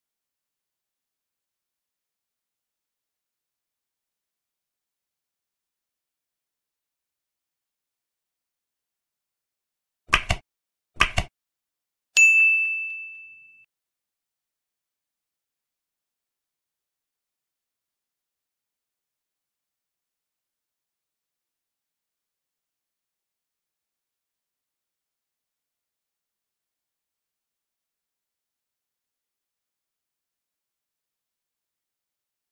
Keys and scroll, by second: 1.1 ctrl+s, 7.4 ctrl+s, 8.4 F7, 15.5 ctrl+a, 16.4 ctrl+a, 17.0 ctrl+a, 17.1 ctrl+BackSpace, 17.7 ctrl+a, 19.1 Tab, 19.6 ctrl+s, 22.1-24.2 typing, 25.3 space, 26.8 space, 27.5 space, 28.7 ctrl+e, 29.0 Tab, 30.7 Tab, 31.5 Left, 32.1-32.5 typing.